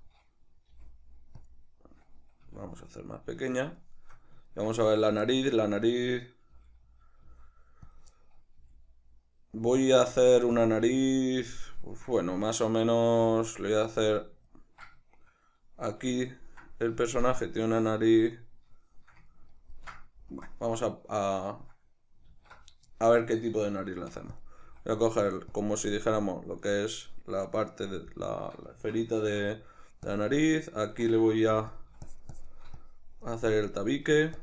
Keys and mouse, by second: 0.8 g, 1.5 click, 2.5 s, 3.7 click, 3.8-7.1 shift+middle drag, 6.6 g, 7.1 click, 7.3 s, 8.0 click, 8.2-9.7 shift+middle drag, 8.6 g, 9.7 click, 9.9 s, 10.6 click, 10.8 g, 11.6 click, 11.8-14.1 ctrl+middle drag, 13.2 g, 14.1 click, 14.5-24.4 ctrl+middle drag, 20.3 KP_Decimal, 22.3 alt+q, 23.9 shift+d, 24.4 click, 24.7 s, 25.6 click, 26.3-30.1 ctrl+middle drag, 29.2 Tab, 30.1-31.1 drag, 31.5 f, 32.1-34.4 shift+drag.